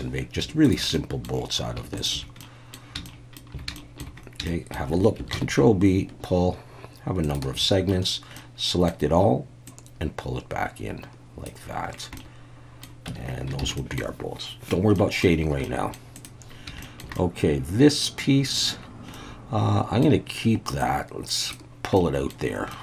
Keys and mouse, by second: 0.9 middle click, 2.0 shift+click, 2.4 middle click, 3.1 shift+middle click, 3.8 shift+middle click, 4.5 shift+middle click, 5.3 ctrl+b, 7.2 shift+click, 7.9 a, 8.4 middle click, 9.7-11.5 drag, 12.2 middle click, 13.1 Tab, 13.6 alt+a, 13.8 middle click, 15.0 middle drag, 15.7 middle drag, 16.8 shift+middle drag, 17.2-18.6 middle drag, 19.1-20.0 middle drag, 20.8 click, 22.0 middle drag, 22.7-22.8 middle drag.